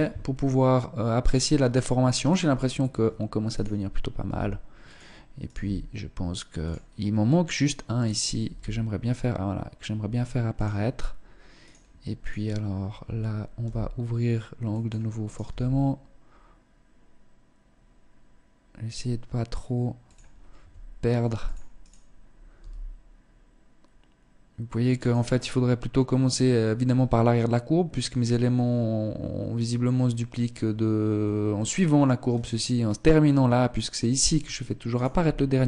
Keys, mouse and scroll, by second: 1.7 right click, 2.1 scroll down 2, 3.1 right click, 3.8 g, 5.0 right click, 5.1 g, 7.0 right click, 8.0 g, 10.3 click, 11.1 right click, 11.7 right click, 13.1 g, 14.8 right click, 15.0 g, 19.2 click, 20.1 s, 21.3 right click, 22.1 g, 34.5 right click, 34.7 g.